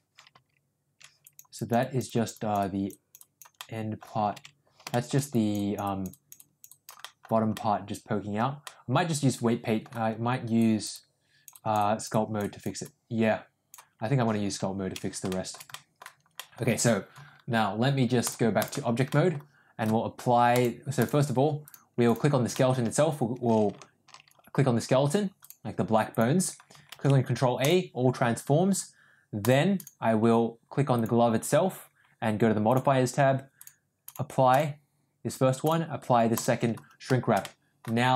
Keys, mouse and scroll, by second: 1.1 click, 1.5 click, 1.7 click, 3.5 middle click, 4.5 ctrl+z, 4.8 shift+middle click, 5.2 click, 5.8 click, 6.9 middle click, 7.5 middle click, 8.6-9.8 middle drag, 10.5 click, 10.9 click, 12.8 click, 14.7 ctrl+z, 15.2 shift+middle click, 15.6 middle click, 16.3 middle click, 18.1 click, 19.0 middle click, 20.5 click, 20.9 click, 21.6 click, 21.9 click, 22.4 middle click, 25.3 click, 26.0 click, 26.8 ctrl+a, 29.3 click, 30.9 click, 33.5 click, 34.1 click, 35.6 click, 37.3 middle click.